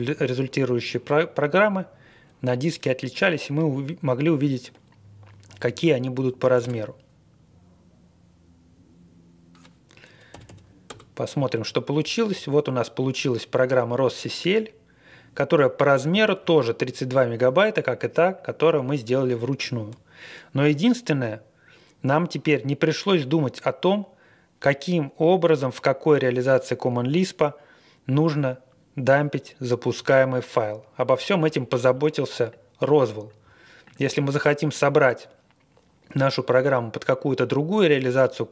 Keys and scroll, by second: 6.6 Return, 10.3-10.8 typing.